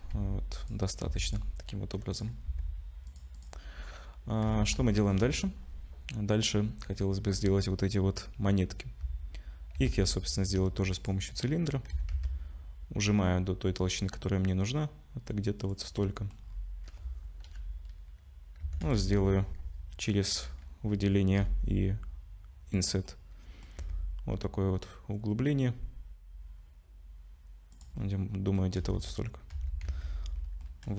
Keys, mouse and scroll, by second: 0.1 s, 1.2 ctrl+s, 1.3 click, 2.1 click, 2.5 s, 3.3 click, 3.7-4.1 scroll down 4, 4.5 ctrl+s, 4.9 shift+middle click, 6.4 scroll up 2, 6.9-7.3 scroll up 1, 9.8 shift+a, 11.9 s, 16.0 middle click, 16.4-17.5 scroll down 4, 17.5-18.0 scroll down 1, 17.5 /, 18.6 Tab, 18.8 3, 18.9 click, 20.3 click, 21.4 i, 23.1 middle click, 23.8 e, 28.0 middle click, 28.8 2, 29.5 2, 29.9 a, 30.6 middle click.